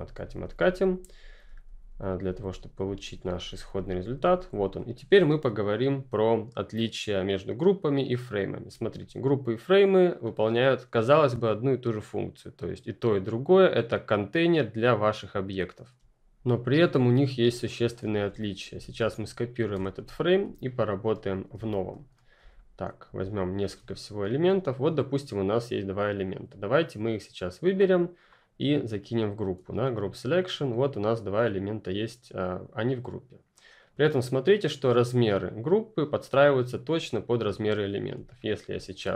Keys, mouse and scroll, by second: 4.7 click, 8.7 click, 8.7 space, 8.9 click, 9.2 space, 17.3 click, 17.4 space, 17.6 click, 17.9 space, 18.0-18.7 ctrl+scroll down 2, 18.7 alt+click, 20.1-20.8 ctrl+scroll up 2, 20.8 click, 21.5 Delete, 22.1 click, 22.3 Delete, 22.5 click, 23.0 Delete, 23.3 click, 23.5 Delete, 24.2 click, 28.2 right click, 30.0 click, 38.1 ctrl+click.